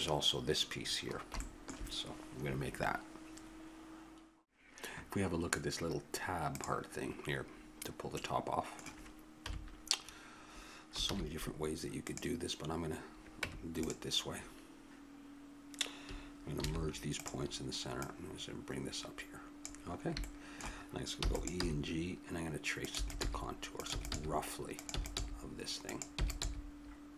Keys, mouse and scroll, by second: 0.9-3.3 middle drag, 8.2-9.4 middle drag, 9.4 KP_7, 11.0 shift+a, 13.4 Tab, 16.6 alt+m, 18.0-19.8 drag, 20.0-21.6 middle drag, 21.2 e, 21.6 g, 22.9-27.1 typing.